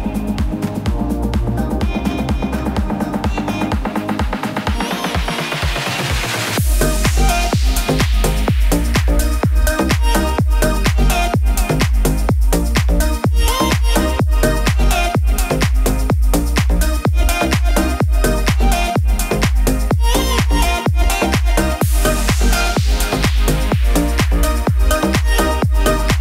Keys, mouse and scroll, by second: 0.4 shift+click, 1.5 p, 2.3 click, 3.6 =, 3.8 =, 4.9 click, 6.1-10.9 drag, 12.2 alt+], 15.3-19.0 drag.